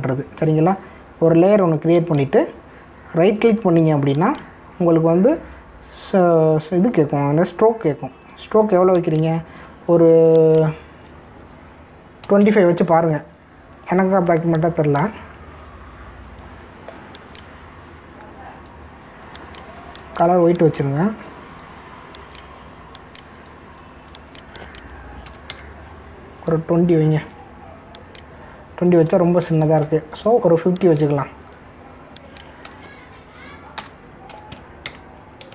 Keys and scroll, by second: 13.2 2, 26.2 2, 30.6 ctrl+alt+z, 33.6 4, 34.8 BackSpace, 35.3 5.